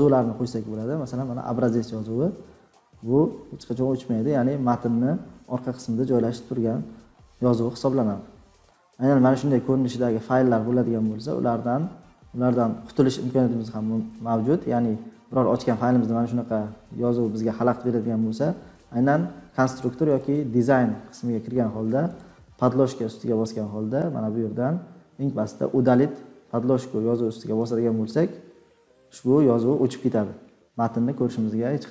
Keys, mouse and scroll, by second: 1.8 click, 1.9 scroll, 2.4-3.8 scroll, 3.8 scroll down 10, 5.2 scroll down 1, 6.1-6.5 scroll, 7.0-8.7 scroll, 9.2-13.0 scroll, 20.2 click, 22.1-25.0 drag, 27.6-30.0 drag, 31.3-31.9 scroll down 10.